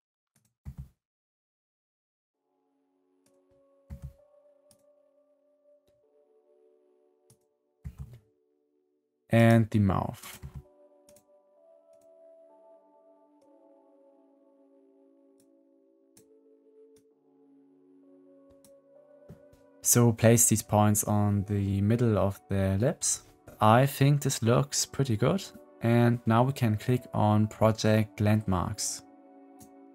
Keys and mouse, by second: 0.5 g, 3.8 g, 7.1 click, 7.8 g, 10.3 g, 13.3-15.3 drag, 16.9-18.5 drag, 29.4 click.